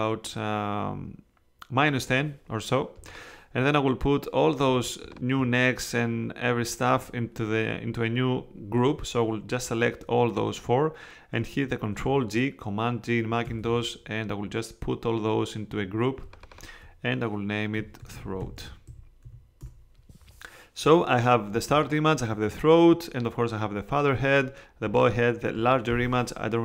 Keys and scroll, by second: 13.4 super+g, 17.8-19.7 typing.